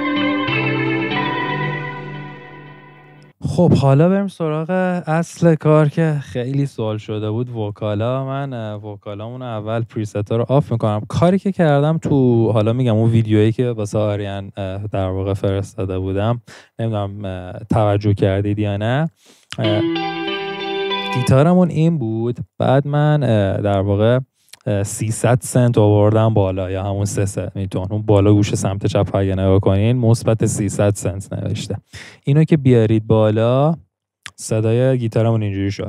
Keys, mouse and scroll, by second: 2.3 •, 19.6 •, 20.5 •.